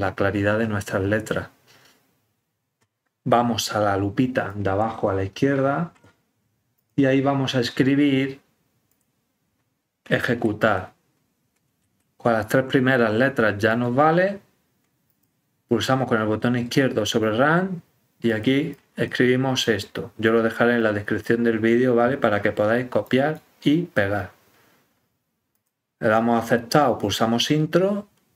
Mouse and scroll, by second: 4.4 click, 6.7 click, 8.8 click, 13.7 right click, 15.0 click, 18.2 click, 18.7 click, 19.6 right click, 20.8 click, 23.0 right click, 25.5 click, 26.1-28.3 drag.